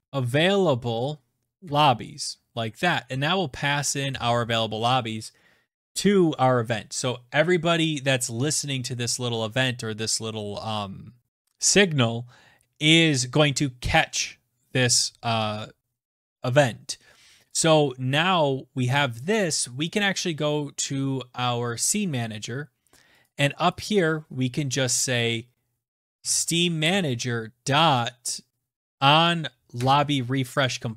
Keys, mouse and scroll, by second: 0.0-0.8 typing, 2.0 Return, 4.5 Right, 17.9 click, 18.4 ctrl+s, 22.1 click, 23.6 click, 24.0 click, 26.1-27.4 typing, 28.8-29.6 typing, 30.0 Tab.